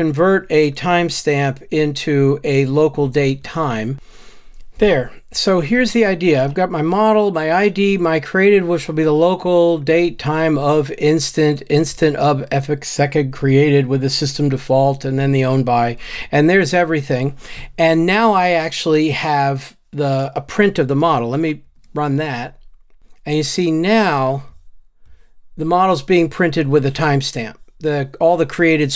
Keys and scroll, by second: 3.9 super+v, 21.9 ctrl+r.